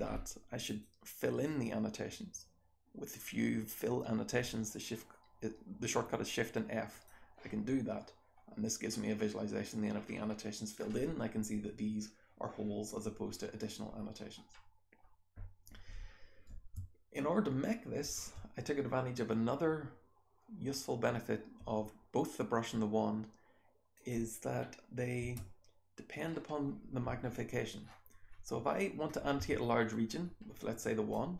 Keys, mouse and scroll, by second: 0.6 click, 0.6-2.5 scroll down 1, 2.5-3.9 scroll down 1, 3.9-6.5 scroll down 1, 6.5-7.9 scroll down 1, 7.9-8.8 scroll down 1, 8.8-9.4 scroll up 1, 9.4-9.9 scroll down 1, 9.9-10.8 scroll up 1, 10.8-11.9 scroll up 1, 11.9-13.6 scroll up 1, 13.6-14.4 scroll down 1, 14.4-14.9 scroll up 1, 14.9-16.7 scroll down 1, 16.7-17.9 scroll down 1, 16.7 space, 17.1-17.9 drag, 17.9-19.9 scroll down 1, 19.9-21.2 scroll down 1, 21.2-22.5 scroll down 1, 22.5-23.9 scroll down 1, 23.9 click, 23.9-25.2 scroll down 1, 25.2-26.1 scroll down 1, 25.4 BackSpace, 26.1-27.7 scroll up 1, 27.7-29.0 scroll down 1, 29.0 scroll up 1, 29.3 w, 30.1 scroll down 2, 30.3-31.0 scroll up 2, 31.0-31.3 drag.